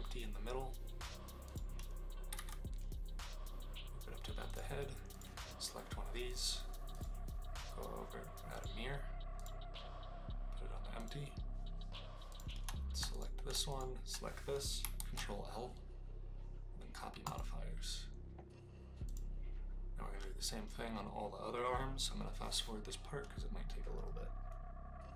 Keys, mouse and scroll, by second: 2.2 g, 2.3 z, 4.4 click, 5.1 click, 6.2 click, 6.9-8.6 drag, 9.5-11.1 drag, 12.3 click, 13.0 click, 13.7 shift+click, 14.9 ctrl+l.